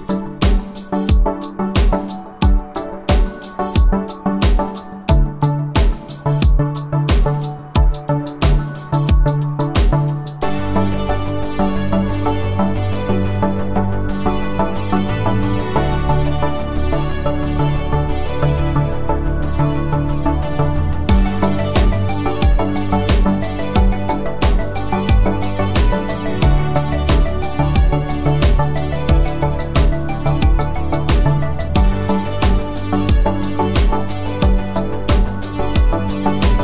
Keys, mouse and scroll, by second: 1.9 ctrl+alt+click, 8.9-10.8 click, 14.1 ctrl+alt+click, 18.0-19.8 scroll up 1, 20.6 space, 20.8 click, 21.1-21.4 space, 21.8-23.3 scroll up 1, 23.3-24.6 click, 25.6 ctrl+alt+click, 34.1 ctrl+alt+click.